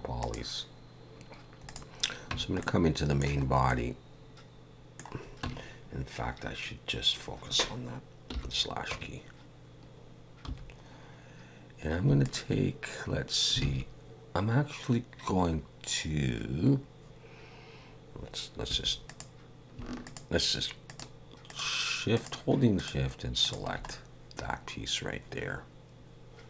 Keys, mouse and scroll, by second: 0.2 click, 1.7 click, 2.3 Tab, 2.6 middle click, 3.5 scroll up 1, 3.7 middle click, 5.5 Tab, 8.3 /, 8.9 Tab, 10.5 2, 12.2 alt+shift+click, 13.6 alt+a, 18.7 2, 19.1 click, 20.0 shift+click, 20.9 shift+click, 21.5 shift+click, 22.1 shift+click, 22.8 shift+click, 23.4 shift+click, 23.9 middle click.